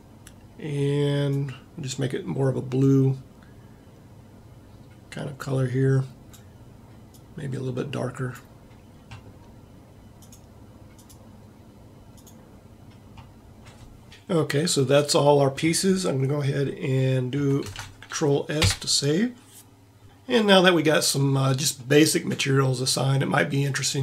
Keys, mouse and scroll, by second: 14.1 middle click, 17.6 ctrl+s, 21.8-23.3 middle drag.